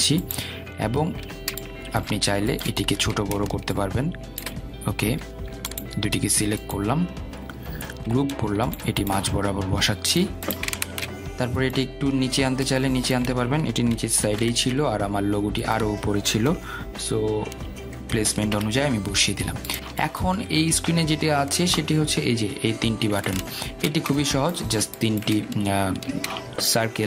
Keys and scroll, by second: 9.5 ctrl+g, 15.4 shift+Down, 18.0 shift+Up.